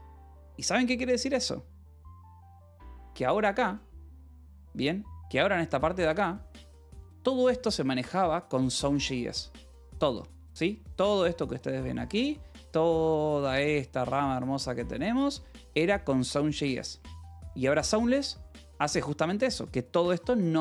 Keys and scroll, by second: 17.5 ctrl+z.